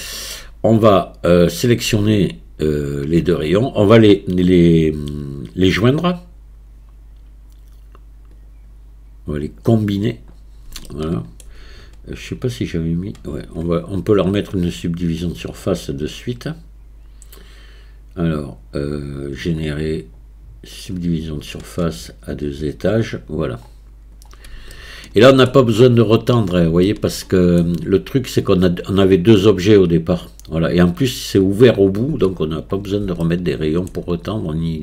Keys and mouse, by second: 0.0 shift+middle click, 1.5 click, 2.7 shift+click, 8.5-9.6 drag, 10.9-11.4 shift+middle drag, 12.5 click, 15.3-20.9 drag, 22.5 click, 24.8-25.5 shift+middle drag, 26.9-27.6 shift+middle drag, 33.3-33.9 shift+middle drag.